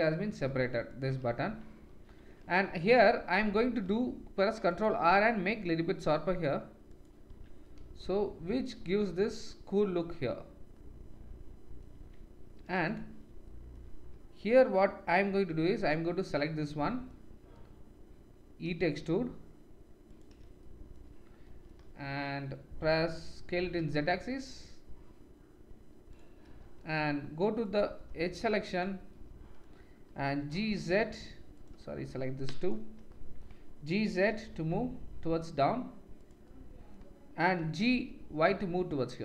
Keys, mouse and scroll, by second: 0.9 click, 1.4 Tab, 2.6 middle click, 3.1 middle click, 4.2 ctrl+r, 7.3 Tab, 7.9-10.8 middle drag, 11.9 Tab, 15.5 3, 18.7 e, 23.4 s, 27.1 1, 27.7-28.8 drag, 29.5 middle click, 30.4 g, 32.6 shift+click, 34.3 g, 37.6 g.